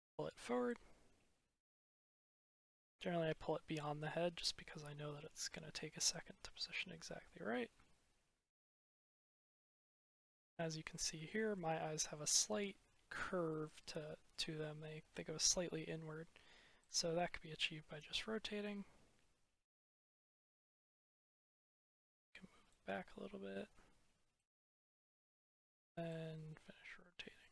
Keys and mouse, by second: 0.5 click, 3.1-3.8 middle drag, 4.4-4.7 middle drag, 5.1 middle click, 10.0-10.4 middle drag, 10.4 click, 10.6-10.9 middle drag, 11.2-11.5 shift+middle drag, 12.3 middle click, 13.5-14.2 middle drag, 17.6 click, 21.5 middle click, 25.1 click, 26.1 click.